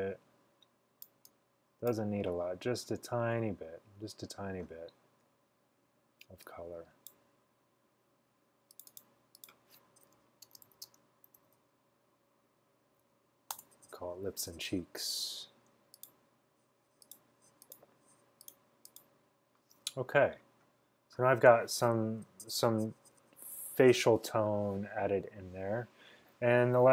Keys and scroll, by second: 10.4-13.6 typing, 13.6 Return.